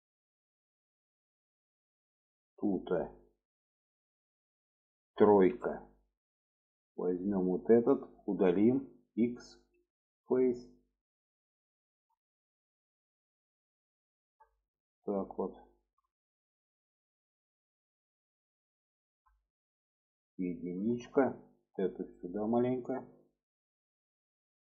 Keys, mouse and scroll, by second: 0.0 shift+middle click, 0.9-2.3 middle drag, 2.7-3.1 middle drag, 3.3-4.5 middle drag, 5.5 3, 5.7-6.8 middle drag, 7.6 click, 8.0 middle click, 9.4 x, 10.8 click, 11.0-12.4 middle drag, 12.6 middle click, 13.6 alt+middle click, 14.5 shift+middle click, 15.7 shift+middle click, 17.0-17.9 middle drag, 18.5 alt+middle click, 19.4-19.7 shift+middle drag, 20.7 1, 21.5 click, 22.5-24.6 drag.